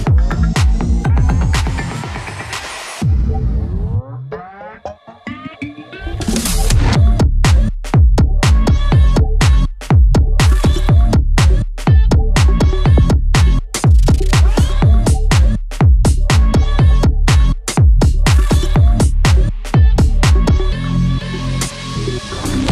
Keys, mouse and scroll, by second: 0.4 click, 1.0-1.6 scroll down 1, 1.6 click, 2.5 ctrl+z, 2.7 alt+click, 3.0 scroll down 1, 3.3 click, 3.9 scroll down 1, 4.1 scroll up 1, 4.7 alt+click, 5.9 scroll down 1, 6.1 scroll up 1, 6.3 alt+click, 8.0 click, 8.3 ctrl+z, 8.5 alt+click, 11.4 scroll down 1, 11.6 scroll up 1, 12.1 scroll down 1, 12.4 scroll up 1, 13.3-15.6 drag, 15.8 scroll down 1, 16.2 alt+click, 17.9 scroll up 1, 18.4 alt+click, 18.7 scroll down 1, 19.2 click, 20.0 scroll down 1, 20.6 scroll up 1, 21.0 alt+click, 22.4 ctrl+z.